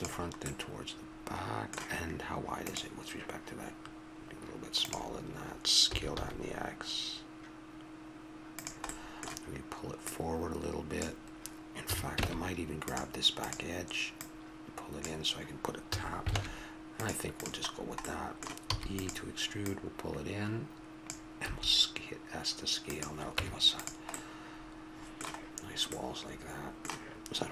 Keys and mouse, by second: 0.5-2.7 middle drag, 5.8 s, 10.0-12.0 drag, 11.8 a, 12.3 ctrl+Tab, 13.4-15.3 right drag, 15.9 a, 16.4 ctrl+Tab, 17.4-18.6 right drag, 18.6 e, 21.5 s, 23.4 Tab.